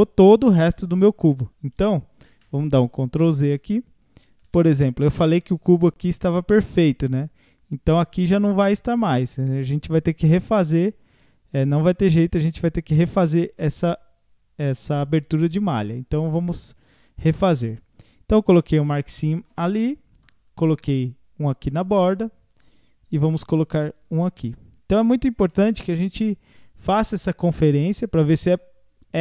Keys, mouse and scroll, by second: 2.3 ctrl+z, 3.1-3.5 scroll down 1, 3.5 a, 3.9 scroll down 1, 4.3 a, 4.5 a, 4.8-7.8 middle drag, 8.1 scroll up 2, 9.0-10.9 middle drag, 10.9 scroll up 1, 11.3 scroll down 1, 12.5 alt+click, 14.9-17.9 middle drag, 20.9-24.0 middle drag, 24.0 alt+shift+click, 25.5-28.5 middle drag.